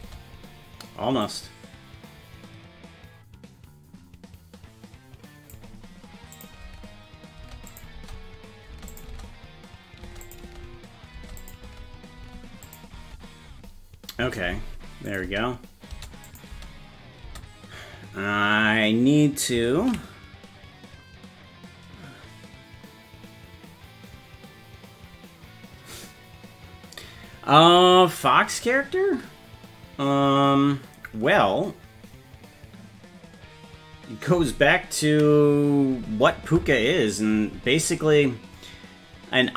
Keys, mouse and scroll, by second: 0.0 space, 1.3-5.6 drag, 6.4 click, 6.6-9.1 typing, 7.7 click, 9.0 click, 10.3 click, 10.3-13.5 typing, 11.5 click, 12.7 click, 15.1 click, 15.2 space, 15.9 space, 16.3 click, 16.5 space, 17.3 space, 20.0 ctrl+s.